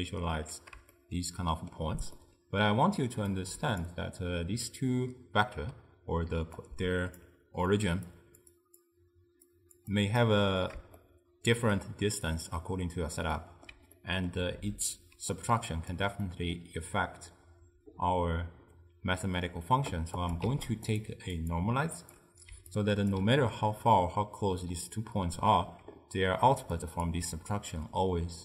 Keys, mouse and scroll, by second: 3.5 click, 5.8-10.3 typing, 6.7-7.3 right drag, 8.2 click, 8.6 click, 9.6 drag, 10.0 click, 11.0-15.2 shift+middle drag, 15.2 d, 15.4-16.0 drag, 16.0 d, 16.0 d, 16.3-19.3 middle drag, 20.3 click, 20.5 shift+d, 21.4-22.6 drag, 22.6 d, 22.8-23.2 right drag, 23.2 d, 26.5 d, 26.8 click, 27.1 d, 27.2 d.